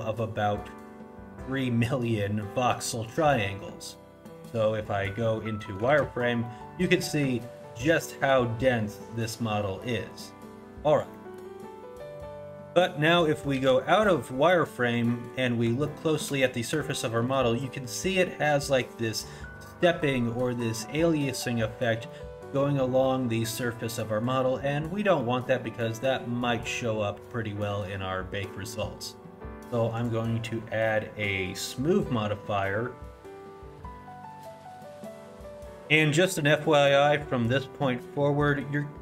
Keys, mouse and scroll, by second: 3.9 middle click, 5.3 middle click, 6.0 shift+z, 6.5 middle click, 7.0 middle click, 7.4 shift+middle click, 7.8 scroll up 1, 8.1 middle click, 8.5 scroll up 2, 9.1 middle click, 9.5-10.6 scroll down 3, 9.9 middle click, 10.6 middle click, 10.9 scroll up 1, 11.1 middle click, 11.8 click, 13.6 shift+z, 14.1 middle click, 14.6 scroll up 1, 15.9 shift+middle click, 16.9 middle click, 18.1 middle click, 25.2 middle click, 30.0 click.